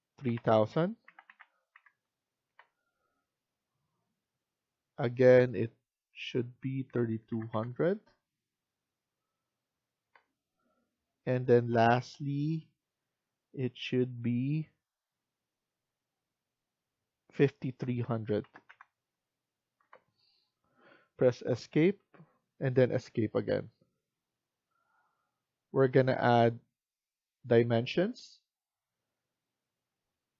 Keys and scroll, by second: 0.0-1.1 typing, 2.4 Return, 6.6-7.7 typing, 9.9 Return, 17.5-18.8 typing, 19.7 Return, 21.8 Escape, 23.4 Escape.